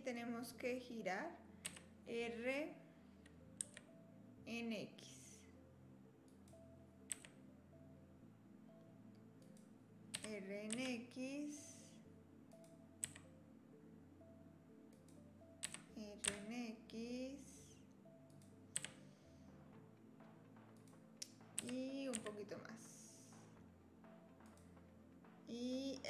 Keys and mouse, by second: 1.6 r, 7.1 e, 12.5 r, 13.1 e, 15.6 r, 18.8 e, 21.6 r.